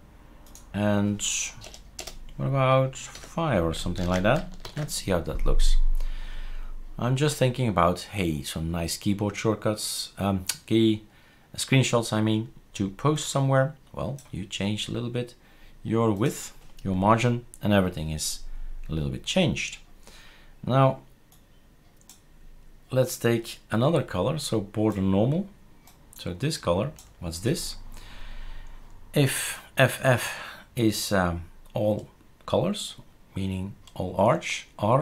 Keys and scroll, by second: 1.6 BackSpace, 2.0 BackSpace, 3.1 5, 4.0 ctrl+s, 4.7 shift+super+r.